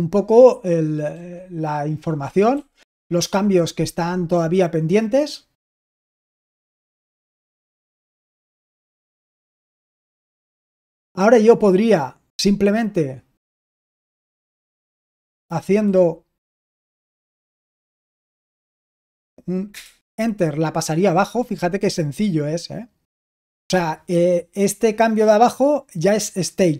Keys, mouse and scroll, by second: 1.1 typing, 2.5 typing, 6.2-8.6 typing, 9.9-10.4 typing, 14.6-15.3 typing, 17.1 Down, 19.6 Return.